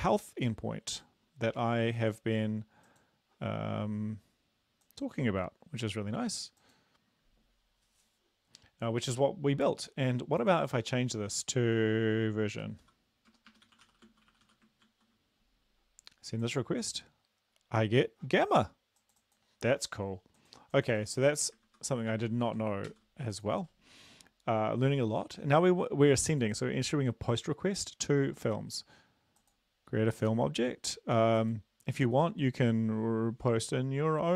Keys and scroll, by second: 12.6-14.5 typing, 14.9 ctrl+s, 21.1 ctrl+z, 21.7 ctrl+z, 22.1 ctrl+z, 22.9 ctrl+s.